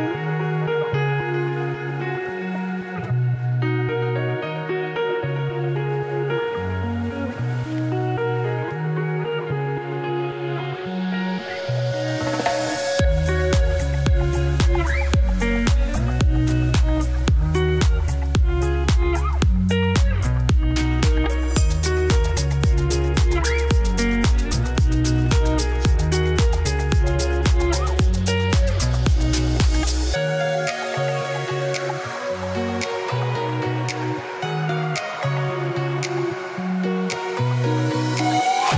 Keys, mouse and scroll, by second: 0.3-1.1 scroll up 1, 1.1 click, 1.3 g, 2.5-3.0 scroll down 3, 3.0 scroll up 2, 3.7 Tab, 3.9 shift+s, 5.2 click, 5.8 middle click, 6.0 scroll down 1, 6.7-7.9 shift+drag, 8.3-9.5 drag, 9.6 click, 9.7 click, 10.7 middle click, 11.0 shift+a, 12.0 KP_7, 12.3 Tab, 12.4 s, 13.3 Tab, 13.4 g, 15.0 Tab, 15.1 s, 16.0 ., 16.3 s, 17.3 ctrl+r, 17.9 ctrl+t, 18.3 ctrl+z, 19.3 s, 21.3 a, 21.4 middle click, 21.7 e, 22.8 Tab, 22.9 g, 24.5 KP_3, 25.0 g, 27.0 middle click, 27.4 Tab, 27.6 s, 28.5 s, 29.6 Tab, 29.8-31.0 middle drag, 31.7 click, 31.9 click, 32.0 click, 32.2 Tab, 32.3 a, 32.7 KP_1, 33.1 g, 34.6 Tab, 34.6 click, 34.8 Tab, 35.0 s, 37.2 Tab, 37.7 shift+s, 38.0 shift+a, 38.7 Tab.